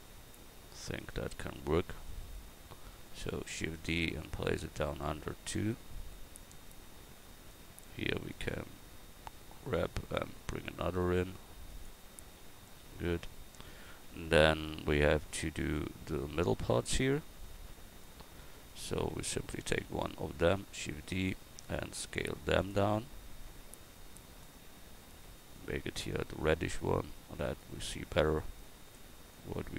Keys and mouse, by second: 3.5 shift+d, 4.2-6.6 drag, 7.9 Tab, 9.8 g, 12.4 a, 18.1 Tab, 18.5-19.7 right drag, 19.7 shift+d, 22.6 s, 24.8-29.7 drag.